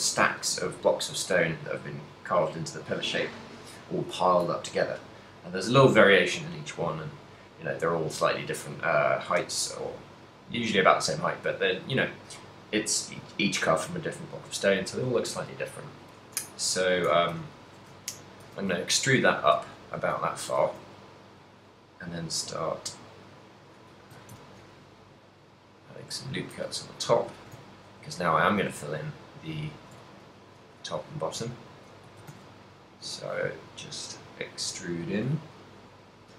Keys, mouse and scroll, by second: 17.1 a, 17.5 a, 17.9 z, 18.5 a, 19.1 ctrl+middle click, 19.9 shift+middle click, 20.6 ctrl+r, 23.9 click, 24.1 a, 24.5 ctrl+r, 26.4 shift+click, 26.6 a, 27.0 middle click, 27.4 shift+middle click, 27.7 ctrl+middle click, 28.5 alt+right click, 29.1 alt+right click, 29.6 alt+right click, 30.1 shift+middle click, 30.7 e, 31.1 s, 32.1 right click, 32.2 s.